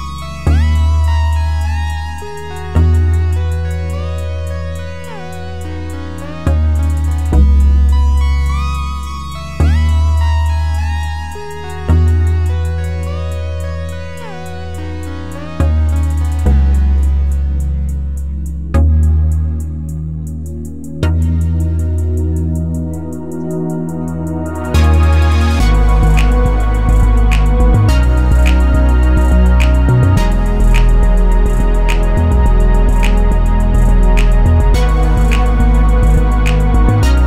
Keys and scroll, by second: 17.1 ctrl+z.